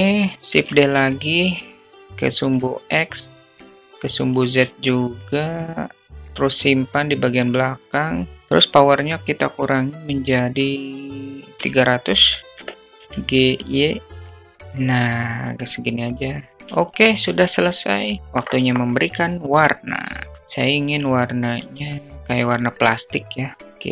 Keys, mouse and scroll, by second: 0.1 shift+d, 2.8-4.0 drag, 4.3 alt+drag, 5.5-7.2 drag, 8.3-12.3 drag, 11.6 0, 12.8 g, 16.5 click, 16.5 shift+a, 16.8 click.